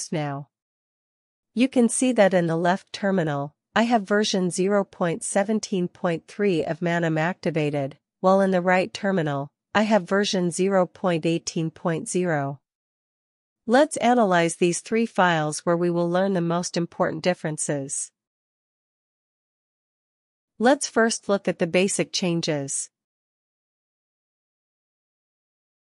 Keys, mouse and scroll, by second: 4.6-6.4 drag, 6.9-8.6 drag, 12.8 click, 14.2 ctrl+b, 14.5-19.6 typing, 21.0-25.9 typing, 23.1 Return, 23.7 ctrl+b.